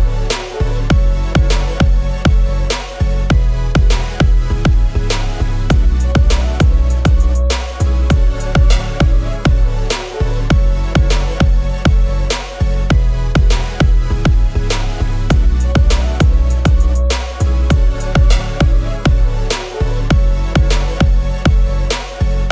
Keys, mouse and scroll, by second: 0.5 alt+Down, 0.6 alt+Down, 1.0 alt+Down, 1.2 alt+Down, 2.5 alt+Down.